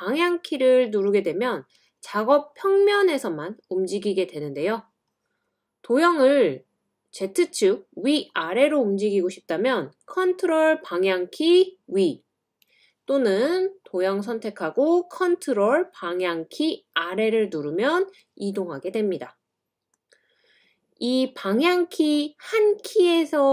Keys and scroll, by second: 0.0-0.3 typing, 0.8 scroll down 1, 2.6-3.5 typing, 10.6 super+Up, 11.1 super+Up, 11.2 super+Up, 16.1 super+Down, 16.6 typing, 16.7 super+Down.